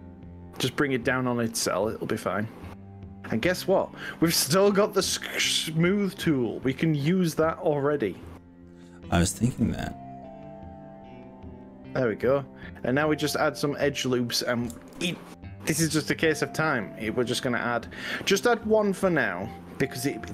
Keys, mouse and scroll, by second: 8.4 click, 9.6 click, 15.0 ctrl+r.